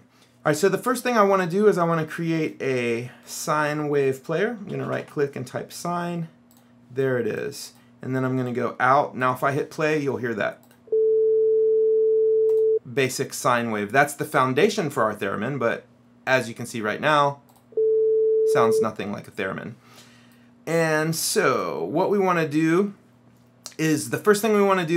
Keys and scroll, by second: 4.5-5.6 typing.